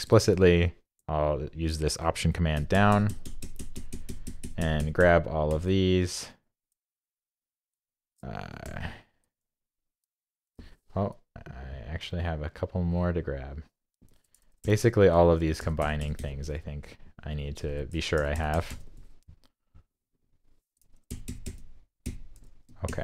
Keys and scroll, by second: 2.5 alt+super+Page_Down, 2.7 alt+super+Down, 14.6 alt+super+Page_Down, 15.0 alt+super+Page_Down, 18.2 alt+super+Page_Down, 18.3 alt+super+Page_Down, 21.1 alt+super+Page_Down, 21.3 alt+super+Page_Down.